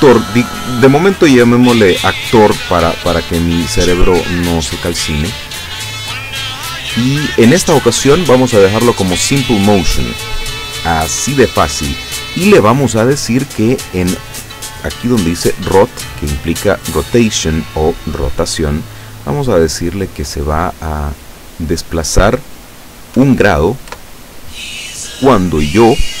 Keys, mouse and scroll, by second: 4.7 click, 6.0-7.9 drag, 20.5 click, 23.2 KP_1, 23.9 KP_Enter.